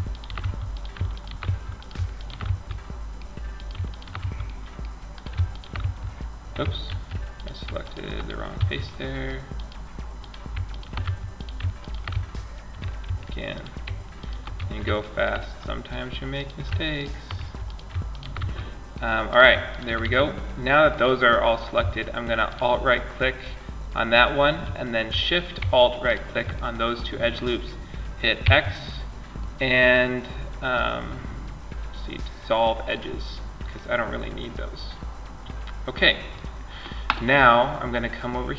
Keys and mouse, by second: 0.0-3.5 right drag, 0.7 f, 1.7 f, 3.5 f, 5.1 f, 6.1 ctrl+z, 7.8 f, 10.3 f, 11.4 f, 12.3 ctrl+z, 13.8 f, 16.6 f, 17.6 f, 19.3 f, 19.8-21.1 drag, 23.7-25.3 middle drag, 27.1 middle click, 27.6 x, 32.6-34.9 middle drag.